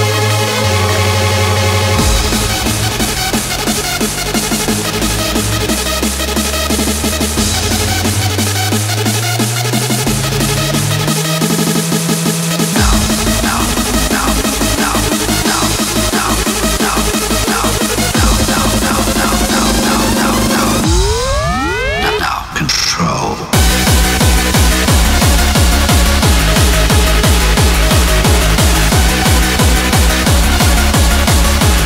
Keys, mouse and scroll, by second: 5.0 ctrl+z, 5.5 ctrl+z, 6.4 ctrl+z, 6.9 ctrl+z, 7.4 ctrl+z, 21.3-23.1 drag.